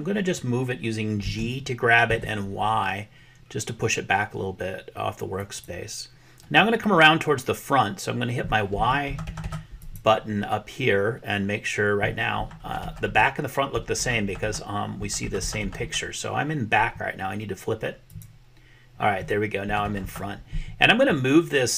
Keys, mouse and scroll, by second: 1.3 g, 9.8 click, 18.1 click.